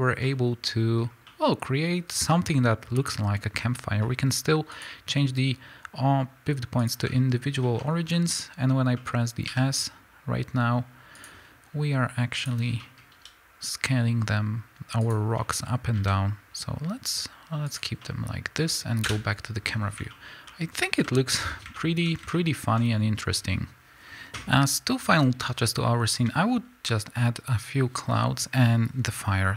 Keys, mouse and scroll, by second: 7.8-8.1 scroll up 2, 9.5 s, 11.3 click, 12.4 click, 12.8-15.1 middle drag, 13.1 s, 15.1 click, 15.4-17.8 middle drag, 16.0 s, 17.8 click, 18.0-24.1 middle drag, 19.0 KP_0, 19.8 scroll down 2, 20.0 scroll up 2.